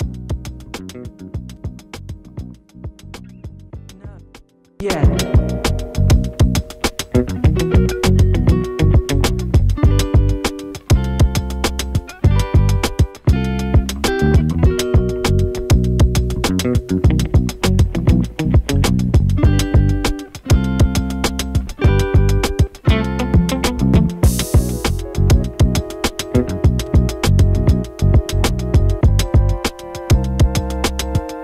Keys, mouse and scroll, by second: 0.8 space, 1.5 click, 1.9 space, 4.1 space, 5.4-7.4 drag, 8.4 u, 9.2 space, 11.3 click, 11.7 j, 12.7 click, 13.4 Return, 13.9 space, 16.8 space, 17.4-20.4 drag, 20.4 ctrl+c, 20.6 ctrl+v, 21.8 right click, 22.3 click, 25.3 F9, 26.0 click, 26.4 space, 30.1 space, 30.6 click, 30.8 space.